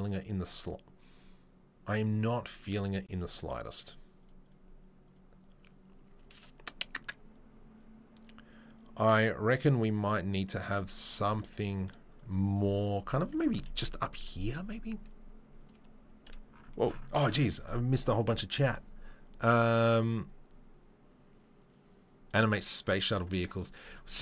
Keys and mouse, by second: 5.2 click, 5.8-24.2 middle drag, 12.1 click, 12.1 right click, 13.3 Tab, 13.7 shift+a.